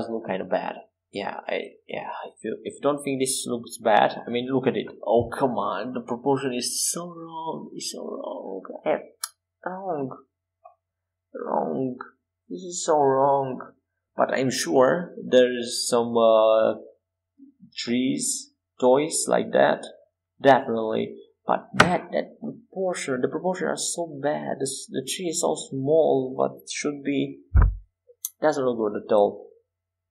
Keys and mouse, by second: 1.3 e, 3.1 Tab, 14.1 Tab, 15.0 Tab, 16.5 KP_5, 17.0 KP_7, 17.6 KP_1, 19.1 KP_5, 20.5 Tab, 22.6 c, 28.3-30.1 drag, 29.2 c.